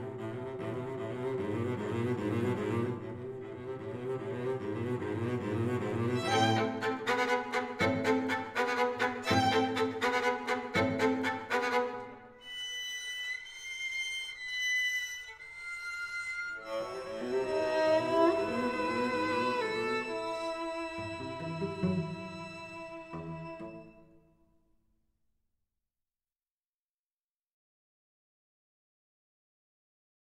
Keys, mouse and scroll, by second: 0.0 Escape, 0.6 middle click, 5.4-7.1 middle drag, 8.5-12.8 right drag, 10.8-12.9 drag, 14.3 ctrl+z, 15.3-17.4 drag, 20.5-22.7 middle drag.